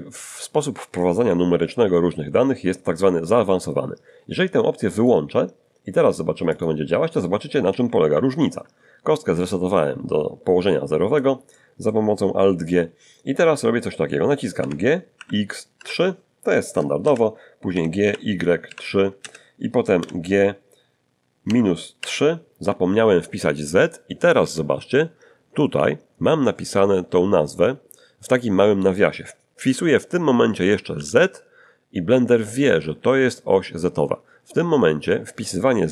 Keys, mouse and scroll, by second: 5.0 click, 6.5 click, 8.1 alt+g, 9.3-11.4 alt+middle drag, 11.5 middle click, 14.6 g, 15.2 x, 15.8 3, 17.0 Return, 17.7 g, 18.0 y, 18.6 3, 19.2 Return, 20.0 g, 21.4 -, 22.0 3, 30.9 z.